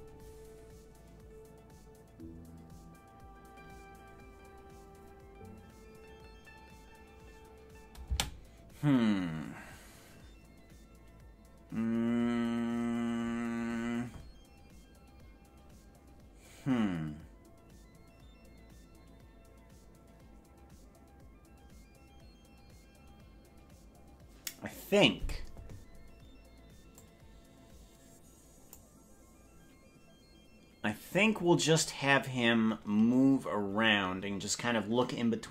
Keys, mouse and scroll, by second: 8.1 space, 27.1-28.8 drag.